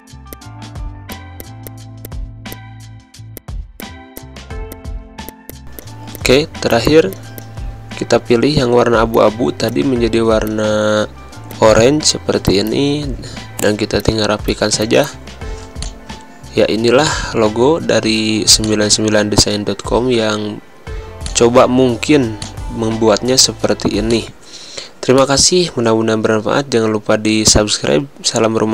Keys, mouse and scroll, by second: 0.0-3.1 drag, 3.1 g, 3.3 click, 4.1 space, 4.2 click, 4.6 v, 4.7-7.8 drag, 7.8 ctrl+z, 9.1 click, 10.5-12.3 shift+drag, 12.3 v, 12.5 click, 13.6 click, 14.9 z, 15.0 click, 15.5 space, 15.8 click, 15.9 space, 18.1 v, 18.6-20.0 drag, 20.0 g, 21.2-23.9 alt+drag, 23.9 space, 24.0 click, 24.3 space, 25.1 click.